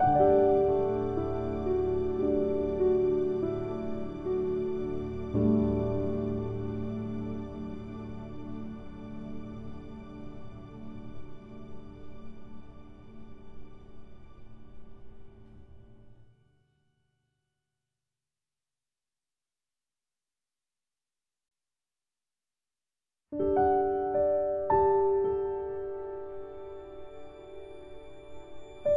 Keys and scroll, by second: 16.1 ctrl+z, 17.2 ctrl+k, 21.0 ctrl+q, 23.3 ctrl+z, 25.9 ctrl+q, 27.7 ctrl+z.